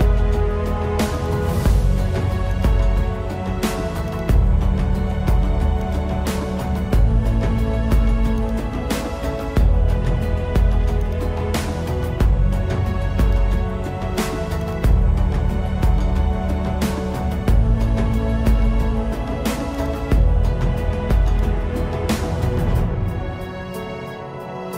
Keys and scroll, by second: 1.8 space, 5.4 space, 8.2 space, 11.1 space, 12.1 space, 13.0 space, 15.8 space, 21.2 space, 23.8 space.